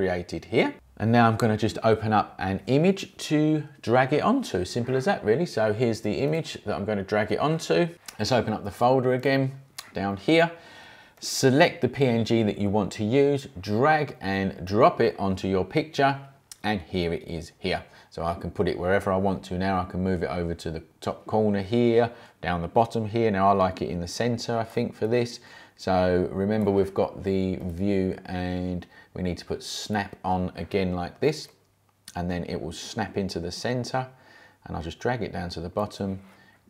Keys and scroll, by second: 6.2 space, 14.6 space.